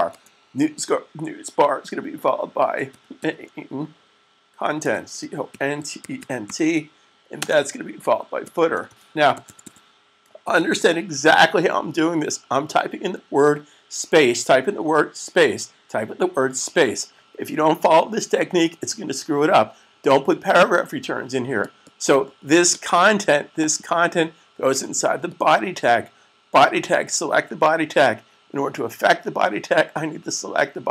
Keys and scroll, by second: 2.5-3.0 typing, 4.6-6.3 typing, 8.2-11.2 typing.